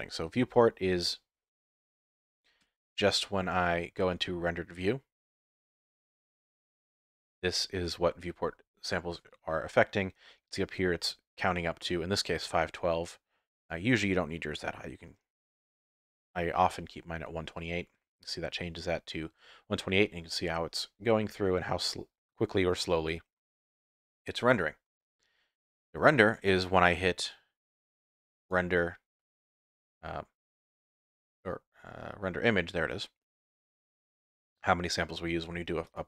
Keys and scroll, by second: 2.6 z.